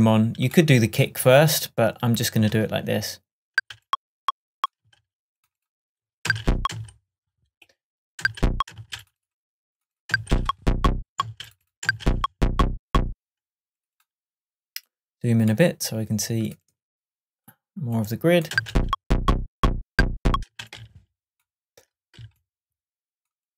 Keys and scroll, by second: 3.6 space, 4.8 space, 6.0 Right, 8.2 space, 10.1 space, 11.2 space, 13.2 space, 18.6 space, 20.5 space.